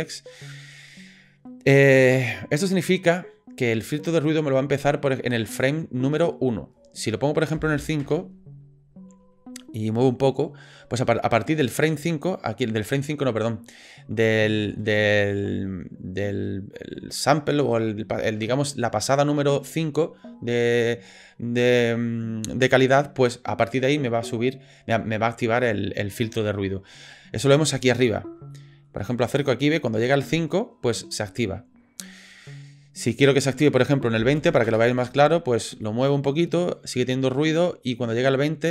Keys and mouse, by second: 5.7-8.5 drag, 28.5 ctrl+click, 33.2-35.3 drag, 35.9 ctrl+click.